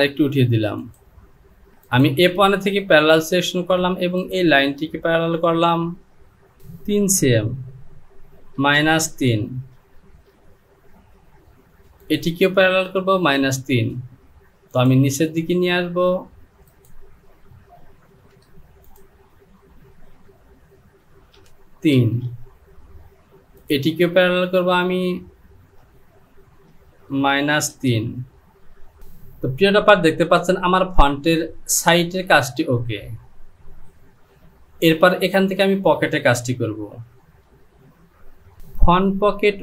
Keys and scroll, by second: 8.6 KP_Subtract, 9.1 KP_3, 10.0 Return, 12.8 Down, 15.6 Down, 17.8 ctrl+z, 18.1 ctrl+z, 20.6 Down, 21.3 KP_3, 22.0 Return, 27.1 KP_Subtract, 27.8 KP_3, 28.2 Down, 33.8 Home.